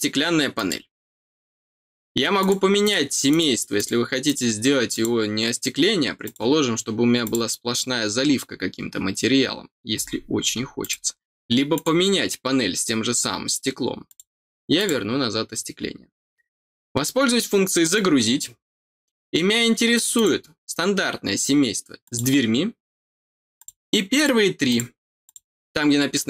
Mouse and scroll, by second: 0.5 click, 2.3 click, 2.8 click, 3.2 click, 3.7 click, 4.2 click, 4.9 click, 6.2 click, 7.2 click, 8.2 middle click, 10.8 click, 11.7 click, 14.0 click, 14.7 click, 17.8 click, 20.1 click, 22.0 click, 23.5 click, 24.1 click, 24.6 click, 25.2 click.